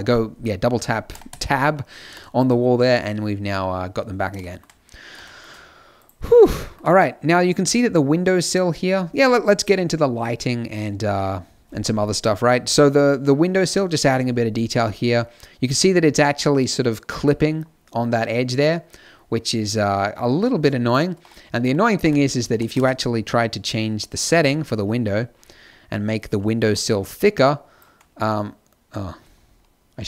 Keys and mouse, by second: 1.0 Tab, 1.2 Tab, 5.9 right click, 6.8-8.9 middle drag, 9.5-12.1 middle drag, 12.4 middle click, 21.3 click, 21.4 middle click, 21.9 t, 22.4 t, 22.7 n.